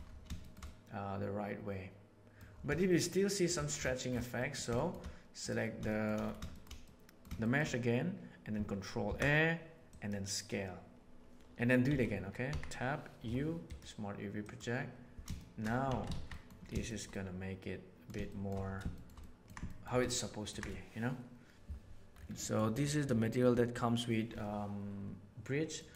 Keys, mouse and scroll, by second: 0.3 shift+middle click, 0.6-2.4 middle drag, 2.8-3.4 shift+middle drag, 4.3 middle click, 4.7 shift+middle drag, 5.8 shift+middle click, 6.4 shift+middle drag, 6.8 middle click, 7.3 shift+middle click, 9.0 ctrl+a, 11.8 Tab, 12.4 a, 13.2 u, 15.3 shift+middle click, 15.8 Tab, 16.0 alt+a, 16.2 middle click, 16.8-18.0 shift+middle drag, 18.2-18.5 shift+middle drag, 18.9 shift+middle click, 19.1 middle drag, 19.6 shift+middle click, 20.0-20.4 ctrl+middle drag, 22.3 middle click, 23.1 middle click, 25.7 middle click.